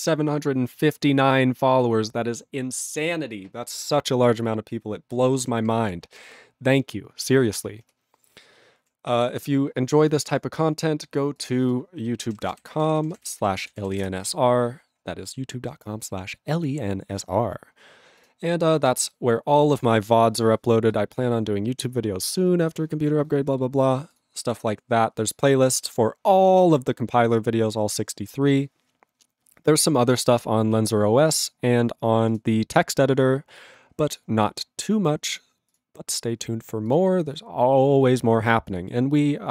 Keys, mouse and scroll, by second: 6.0 ctrl+b.